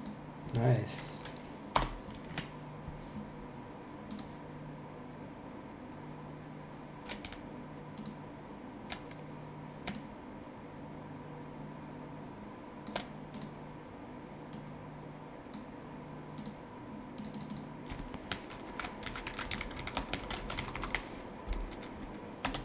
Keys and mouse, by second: 1.8 BackSpace, 2.3 KP_3, 4.1 click, 8.0 shift+click, 9.9 ctrl+shift+click, 13.3 click, 14.5 click, 16.4 click, 18.4-21.3 typing, 22.4 space.